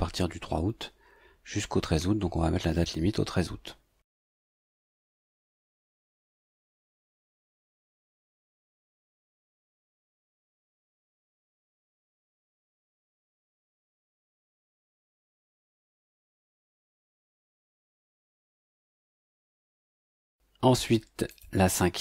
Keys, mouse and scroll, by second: 4.8 click, 7.3 click, 8.7 click, 9.7-12.3 typing, 13.3 click, 16.3 click, 17.4 click, 21.3 click.